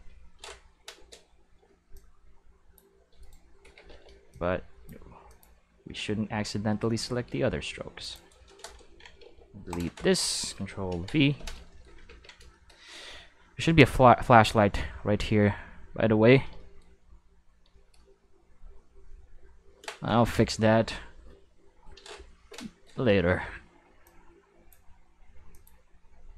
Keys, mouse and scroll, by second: 1.4 c, 1.9-2.7 drag, 3.2 right click, 3.6 alt+a, 3.8 c, 4.3 click, 5.2 click, 8.0 click, 8.1 right click, 9.2 x, 9.7 click, 10.8 ctrl+v, 12.0 ctrl+s, 12.5 shift+middle click, 22.8 middle click, 23.2 c, 24.0-24.7 drag, 25.5 click.